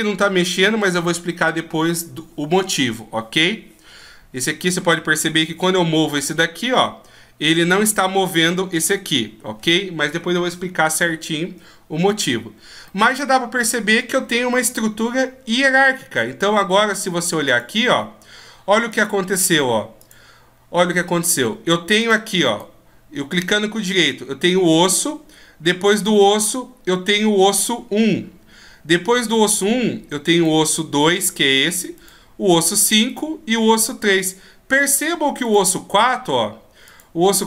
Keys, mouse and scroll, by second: 5.4 g, 12.8 middle click, 17.4 click, 18.8 click, 20.7-21.9 scroll down 1, 21.9 click, 22.4 right click, 25.9 right click, 30.2 right click, 31.9 right click, 35.3 right click, 36.8 click.